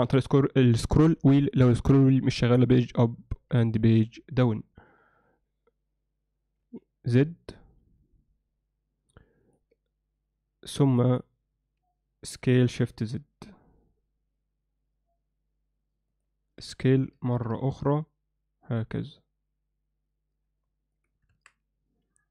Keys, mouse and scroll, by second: 10.9 click, 11.1 click, 21.4 Tab.